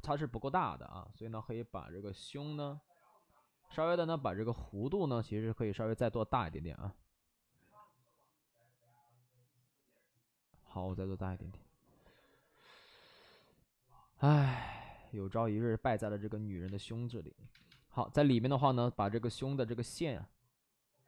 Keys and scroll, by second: 4.7 ctrl+z, 6.3 ctrl+z, 16.6-18.2 typing.